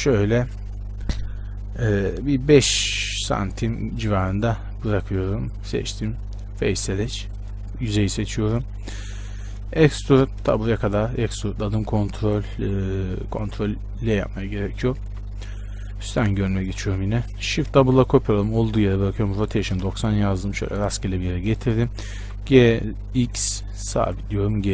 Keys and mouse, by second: 5.6-7.6 drag, 7.6-10.3 right drag, 10.3-12.8 middle drag, 10.3 e, 12.8 z, 15.2 KP_7, 16.3 KP_Decimal, 17.8 shift+d, 19.3 r, 20.8 g, 22.4 g.